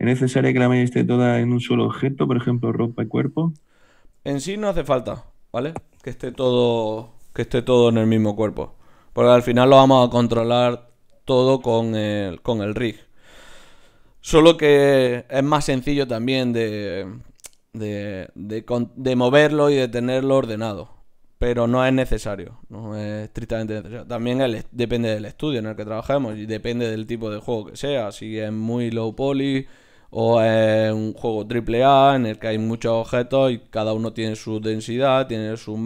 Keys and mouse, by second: 3.3 KP_1, 3.8-6.5 middle drag, 8.8-11.1 right drag, 11.1-14.0 middle drag, 21.0 middle click, 21.9-24.7 right drag, 31.8-35.4 middle drag.